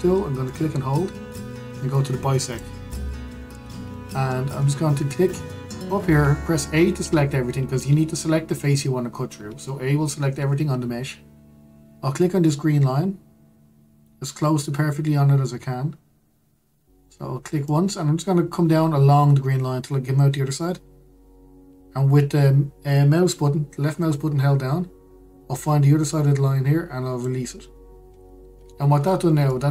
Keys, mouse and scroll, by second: 1.2-4.2 drag, 4.7-7.7 shift+middle drag, 7.7 a, 18.3 click, 29.3-29.7 scroll down 1.